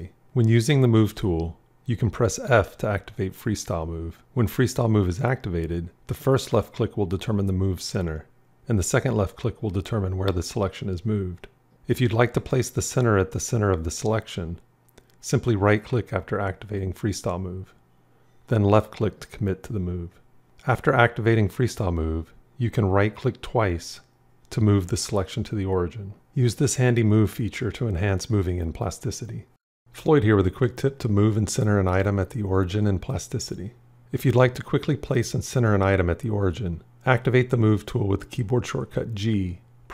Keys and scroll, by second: 1.2 g, 2.0 f, 13.7 f, 20.4 f, 37.9 g.